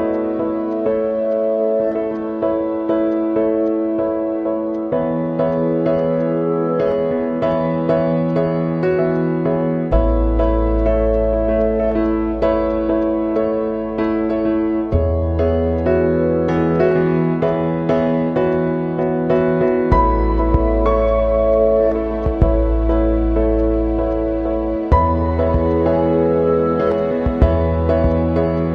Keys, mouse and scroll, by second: 0.6 space, 0.8-1.9 drag, 1.9 space, 1.9-17.8 drag, 17.8-20.4 drag, 20.4 space, 20.5 click, 20.7 space, 21.6-24.7 drag, 24.7 space, 24.8 click, 24.9 space, 25.7 click, 26.7 space, 26.8 click, 26.9 space, 27.4 click, 27.7 space, 27.8 click, 28.0 space.